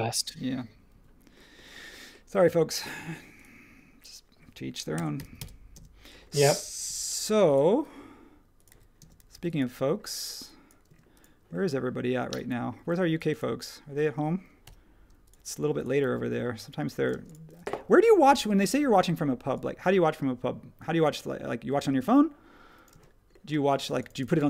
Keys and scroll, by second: 0.9 ↺, 4.7-5.6 typing, 6.8 l, 8.7-9.3 typing, 10.9 space, 12.7 e, 14.0 space, 14.6 l, 17.1 space, 18.2 p, 22.9 space, 23.8 space.